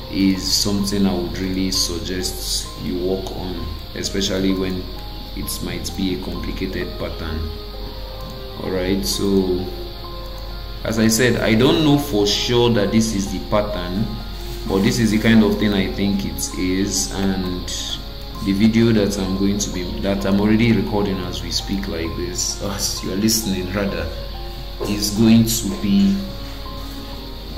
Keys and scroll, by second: 2.8 BackSpace, 6.0 shift+m, 12.4 shift+m, 15.9 Caps_Lock, 19.4 ctrl+g.